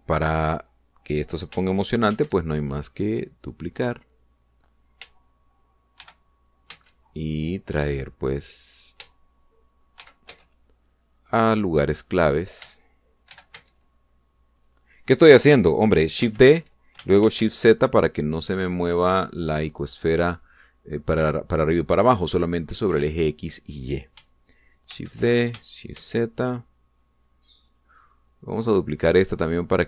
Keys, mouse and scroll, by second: 0.1-0.5 shift+scroll down 3, 1.1 right click, 3.0 shift+d, 4.7 click, 6.9 shift+d, 7.5 shift+z, 9.5 click, 10.9 shift+d, 11.1 shift+z, 13.1 click, 14.1 shift+d, 14.4 shift+z, 15.5 click, 17.1 shift+d, 18.1 shift+z, 19.8 click, 25.8 shift+d, 26.8 shift+z, 28.5 click.